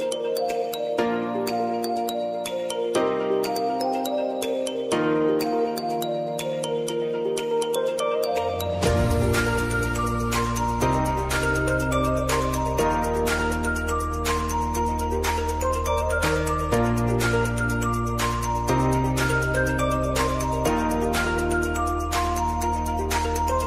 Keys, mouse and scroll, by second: 2.1 v, 2.6-5.6 drag, 5.6 Up, 6.6 Left, 8.0 Up, 11.8-17.2 drag, 17.2 Down, 18.1 Up, 19.1 Left, 21.0 Up, 22.3-22.8 alt+scroll down 1, 22.8-23.2 alt+scroll up 1.